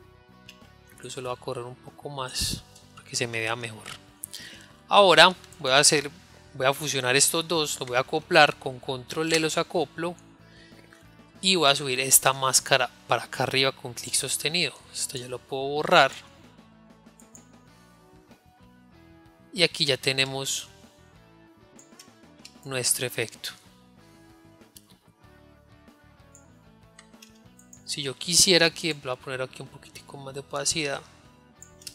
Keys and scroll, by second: 9.8 ctrl+e.